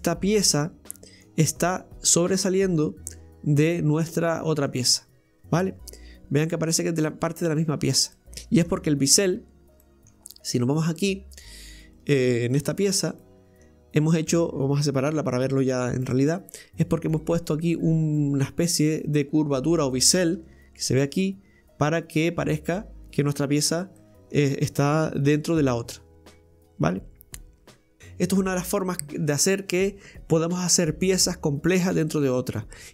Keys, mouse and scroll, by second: 8.9-9.4 scroll up 3, 9.4 Tab, 9.9 middle click, 10.5 right click, 11.9 right click, 12.6 Tab, 12.7 right click, 13.2-15.1 middle drag, 15.1 g, 20.4 Tab, 23.6 a, 24.0-25.3 middle drag, 25.3 g, 28.0-28.6 scroll up 1, 28.7-29.2 middle drag, 29.2-32.9 scroll up 1.